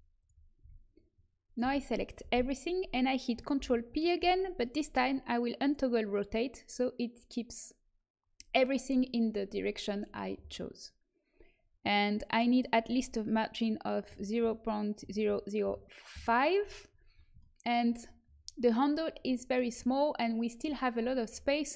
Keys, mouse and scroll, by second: 0.5 a, 1.6 a, 3.5 ctrl+p, 5.5-10.7 drag, 12.2-14.0 drag, 15.2 KP_0, 21.6 middle click.